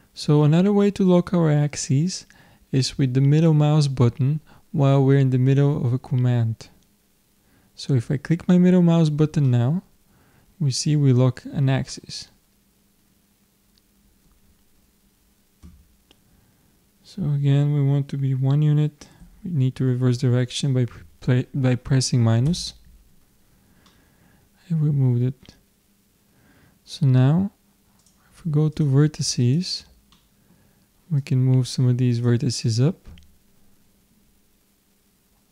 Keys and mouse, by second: 23.4-27.0 middle drag, 28.0-33.1 drag.